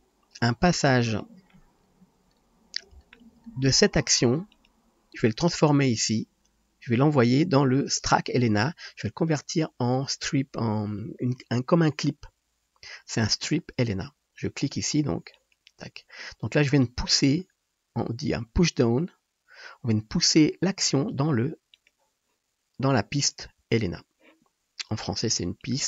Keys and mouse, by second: 0.7-4.7 drag, 4.7-15.3 middle drag, 15.3-21.8 drag, 21.8-25.6 middle drag, 25.6-25.8 drag.